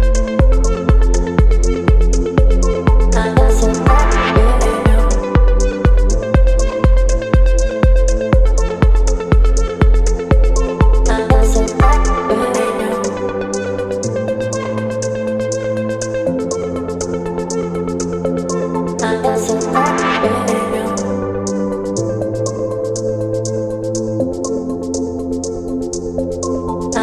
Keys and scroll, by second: 1.8 space, 4.3 space, 13.0 ctrl+BackSpace, 14.1 ctrl+z, 14.3 x, 14.8 ctrl+BackSpace, 15.5 ctrl+d, 16.3 space, 20.8 ctrl+BackSpace, 21.4 space, 23.5 space.